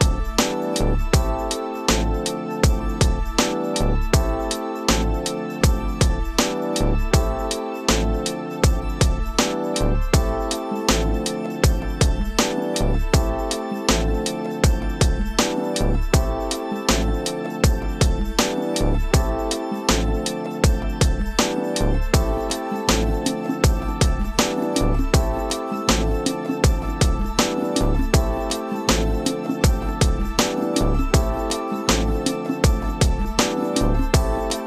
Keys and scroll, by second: 0.7 space, 3.9 space, 9.3 space, 24.8 space, 28.6 space, 31.4 ctrl+Return, 34.0 ctrl+space.